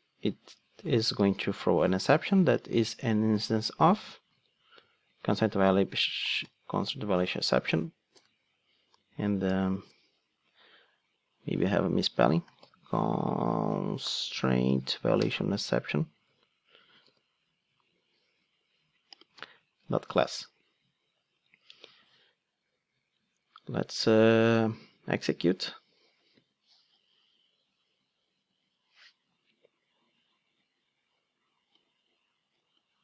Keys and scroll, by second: 0.5 Return, 4.3 super+c, 5.3 super+v, 9.9 alt+Return, 15.3 Return, 16.3 super+c, 17.0 super+v, 19.8 Return, 25.4 ctrl+d.